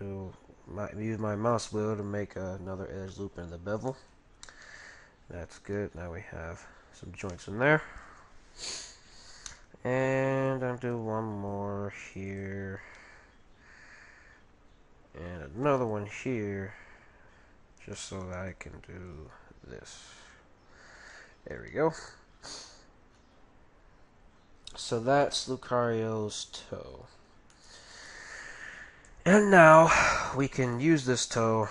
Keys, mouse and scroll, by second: 4.4-7.3 middle drag, 5.6 a, 7.5 middle click, 8.8 middle click, 10.7 middle click, 10.9 ctrl+r, 13.8 ctrl+r, 15.5 ctrl+r, 17.8 right click, 18.6 ctrl+r, 18.6-20.1 right drag, 19.1 g, 21.4-22.7 middle drag, 22.7 Tab, 24.9 middle click, 26.9 Tab, 26.9 middle click, 27.2-27.5 scroll up 1, 29.6-30.8 middle drag, 31.1-31.7 middle drag.